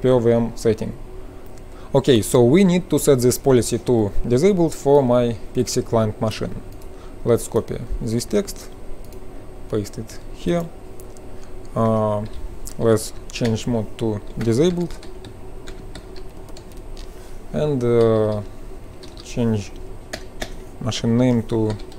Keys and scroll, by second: 8.5 F12, 11.9 Return, 12.3 Up, 13.5-17.4 typing, 17.9 Left, 18.1 Left, 18.2 Left, 18.9 ctrl+shift+Left, 19.4-21.9 typing.